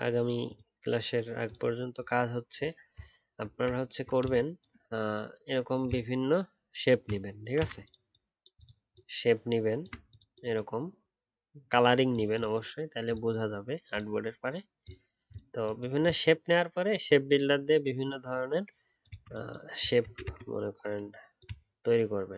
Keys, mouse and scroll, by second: 3.8-4.3 alt+scroll up 1, 8.9 alt+click, 20.0 ctrl+c.